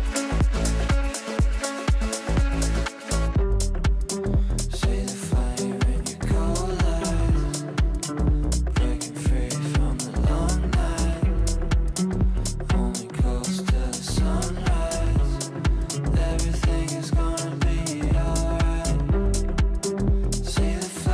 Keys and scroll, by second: 2.8 Delete, 13.8 Delete.